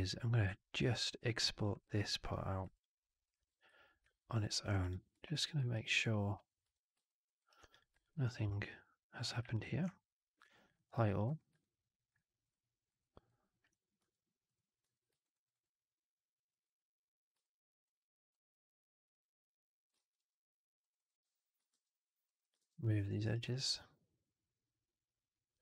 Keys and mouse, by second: 1.3 alt+click, 1.7 click, 2.1 click, 2.6 shift+click, 3.1 shift+click, 3.9 alt+q, 4.2-4.5 alt+drag, 4.7 click, 5.0 2, 5.6 alt+right click, 5.9 alt+click, 6.5 4, 6.9 alt+drag, 7.3 alt+right drag, 7.6 click, 7.9 shift+click, 9.4 shift+click, 10.6 click, 10.9 alt+click, 11.1 1, 11.5 alt+right click, 12.0 alt+click, 12.4 alt+right click, 12.9 alt+click, 13.1 alt+right click, 13.9 2, 14.7 f, 15.1 alt+right click, 15.3 alt+right click, 15.5 alt+click, 17.3 alt+click, 18.3-19.7 drag, 19.8 ctrl+z, 20.7 click, 20.8 click, 21.6 ctrl+BackSpace, 22.1 click, 22.3 click, 22.5 ctrl+BackSpace, 23.1 alt+right click, 23.3 right click, 23.4-25.6 drag.